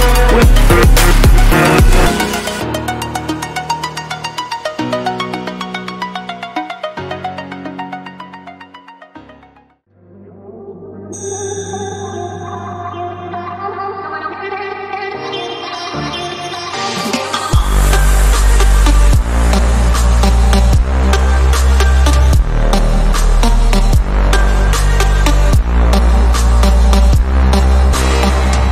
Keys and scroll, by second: 14.5 ctrl+alt+shift+e, 17.1 ctrl+shift+a.